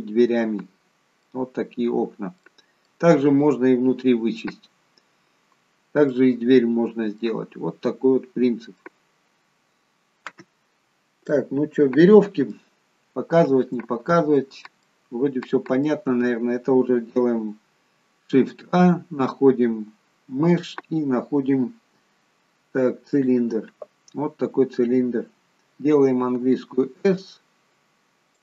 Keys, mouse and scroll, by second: 1.5-2.8 scroll down 8, 2.4 middle click, 2.7 middle click, 4.7-5.4 scroll down 1, 6.1 middle click, 7.4 scroll up 3, 7.9 scroll down 1, 8.8 middle click, 10.7-11.1 scroll down 3, 11.3 middle click, 12.9 scroll up 1, 13.9-14.3 scroll up 2, 14.8 middle click, 14.8-15.1 scroll up 1, 18.3 shift+a, 24.1 scroll down 1, 26.1-27.0 scroll down 2, 26.1 s.